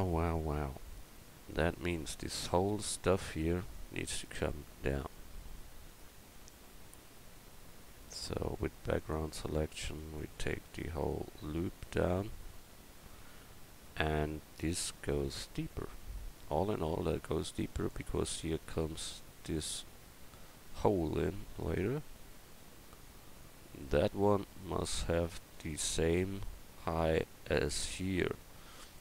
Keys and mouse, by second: 2.5-4.4 right drag, 6.1 Tab, 8.1-16.9 drag, 10.0-12.7 right drag, 20.1 a, 20.9 Tab, 21.7 middle click, 28.8-29.0 right drag.